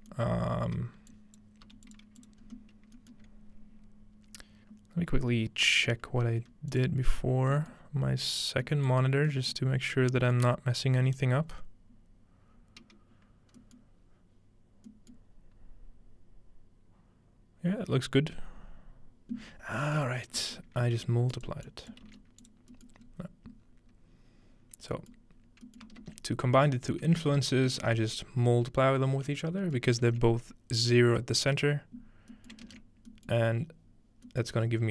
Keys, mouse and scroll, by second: 0.0 middle click, 0.5-1.1 scroll down 2, 1.1 shift+click, 1.7 g, 2.2 click, 2.4-5.3 scroll up 3, 13.8-15.5 middle drag, 14.0-15.5 scroll down 1, 20.0-20.4 middle drag, 20.6 middle click, 21.3-22.5 drag, 22.1 shift+d, 22.6-24.4 drag, 23.1-23.7 scroll up 1, 23.7-24.4 scroll down 1, 25.0-25.5 scroll down 2, 26.0 ctrl+space, 26.7 middle click, 27.1-29.5 ctrl+middle drag, 29.9-32.2 ctrl+middle drag, 32.6 ctrl+middle click.